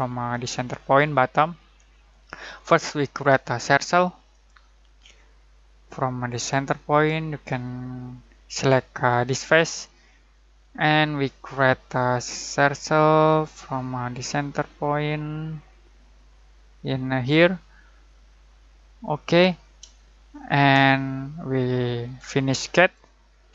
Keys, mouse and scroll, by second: 0.0-0.9 typing, 4.3 click, 9.2 click, 10.6-14.2 middle drag, 17.2 click, 19.9 scroll down 1, 20.3 scroll up 1, 20.9 shift+middle click, 22.7 click.